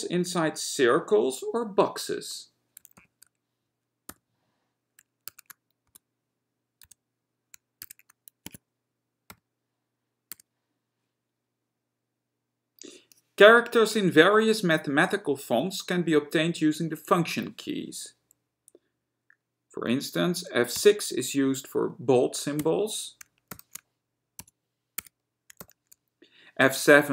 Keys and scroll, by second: 4.3 y, 5.4 @, 6.0 shift+x, 7.0 shift+z, 8.0 @, 8.5 Tab, 9.5 ., 10.5 w, 20.9 F6, 22.9 v, 24.5 F6, 25.3 w.